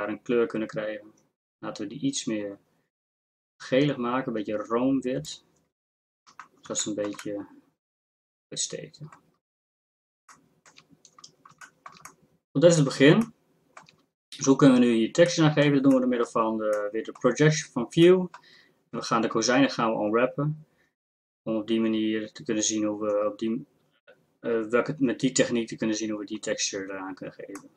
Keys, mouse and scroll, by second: 6.3-8.8 middle drag, 11.8 middle click, 12.1 middle click.